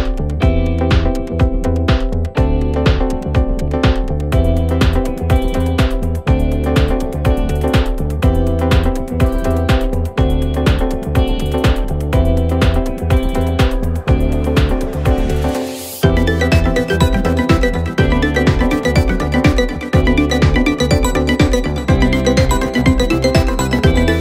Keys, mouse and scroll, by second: 1.0 ctrl+click, 1.2 middle click, 1.9 shift+click, 2.1 middle click, 2.8 ctrl+click, 3.0 middle click, 3.9 shift+click, 4.1-5.0 middle drag, 5.0 ctrl+click, 5.5 ctrl+z, 6.1 ctrl+click, 6.3-7.5 middle drag, 7.5 shift+click, 7.7 middle click, 8.4 ctrl+click, 8.8-10.3 middle drag, 10.4-11.2 scroll up 7, 11.2-12.5 drag, 21.0 click, 21.3-22.1 scroll down 6, 22.1-23.6 drag, 23.9 scroll down 1, 24.1 middle click.